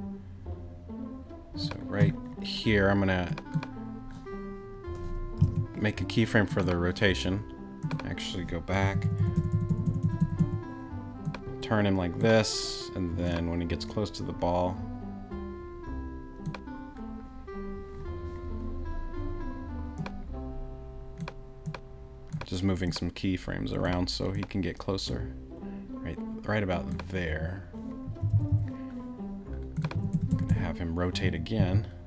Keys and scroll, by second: 5.5 super+z, 8.8 Right, 28.1 Left, 29.9 Right, 31.6 Left.